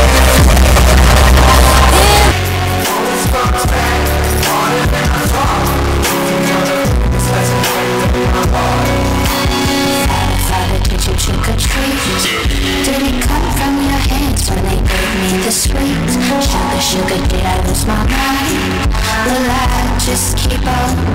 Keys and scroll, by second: 2.3 Page_Down.